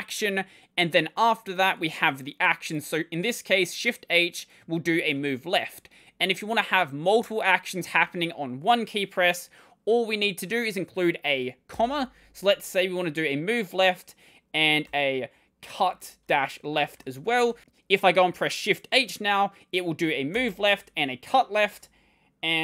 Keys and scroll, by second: 7.8 shift+a, 14.4-17.4 typing, 20.2 shift+h, 21.5 w, 21.6 w.